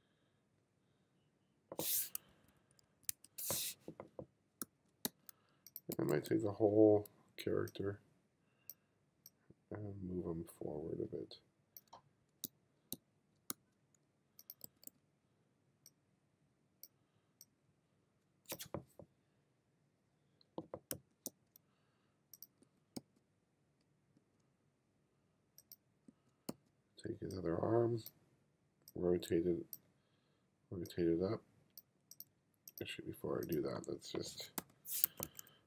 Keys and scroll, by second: 2.4 1, 4.7 f, 5.1 g, 6.0 b, 12.0 f, 12.5 g, 13.5 f, 21.3 g, 22.6 b, 24.2 b, 24.7 b, 26.1 b, 34.6 m, 35.1 2.